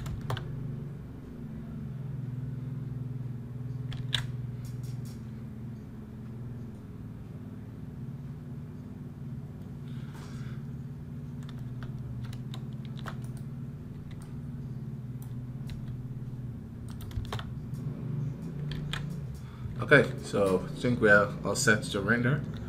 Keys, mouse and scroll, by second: 13.0-22.6 right drag.